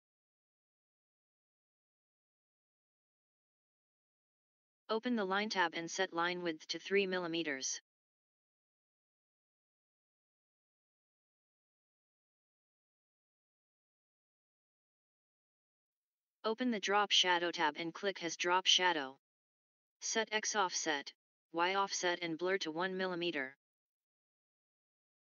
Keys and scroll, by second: 11.0 typing, 11.9 Return, 23.4 1, 24.0 Tab, 24.6 1, 25.0 Tab.